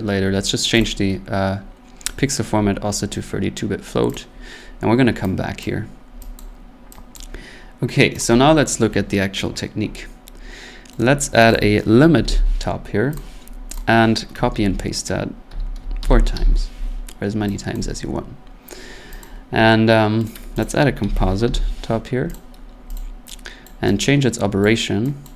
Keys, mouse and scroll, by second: 0.8 click, 3.3 scroll, 4.1 click, 5.6 click, 6.4 click, 7.2 click, 8.2 click, 11.0 right click, 11.5 click, 11.9-12.8 typing, 13.2 click, 13.8 click, 15.5 ctrl+c, 15.7 ctrl+v, 16.0 ctrl+v, 16.3 ctrl+v, 16.9-17.2 scroll, 17.7 click, 18.1 middle click, 19.2 click, 20.2 right click, 20.6 click, 21.0-21.9 typing, 22.3 click, 22.9 click, 23.7 click, 24.6 click, 25.2 click.